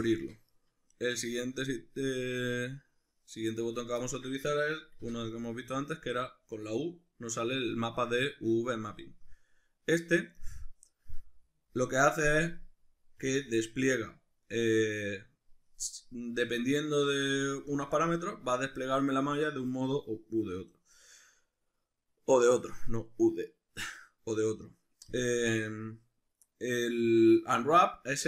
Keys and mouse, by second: 2.6-4.0 drag, 4.0-11.8 ctrl+middle drag, 5.0 u, 13.2 u, 17.7 u.